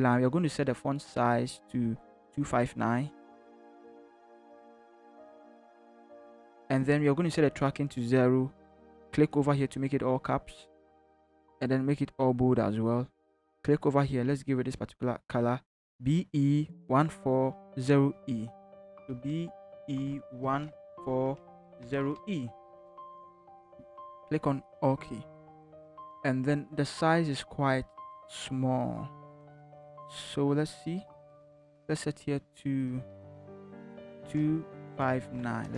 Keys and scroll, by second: 3.3-5.8 typing, 19.2-22.7 typing, 34.2 2, 34.8 5, 35.2 9, 35.6 Return.